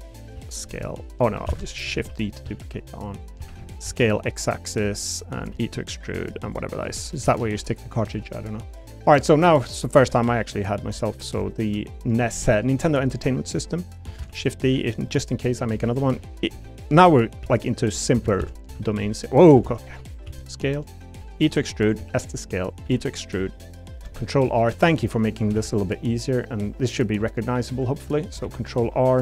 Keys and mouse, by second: 0.2 click, 0.3 s, 0.6 y, 1.1 right click, 1.5 ctrl+z, 1.9-3.8 typing, 4.6 click, 5.5 e, 6.0 click, 6.4 click, 6.8 l, 7.2 a, 7.4 g, 7.8 click, 11.0 middle click, 11.5 shift+middle click, 11.7 shift+click, 14.2 shift+d, 16.5 e, 16.9 click, 17.4 s, 18.2 ctrl+z, 18.4 ctrl+z, 18.7 s, 19.0 click, 19.6 ctrl+z, 19.8 click, 20.2 s, 20.8 click, 21.2 e, 21.8 click, 22.0 s, 22.7 click, 22.8 e, 23.8 click, 24.1 ctrl+r, 25.3 click, 25.5 ctrl+r, 25.8 click, 27.2 click, 27.9 3, 28.4 r, 28.6 click.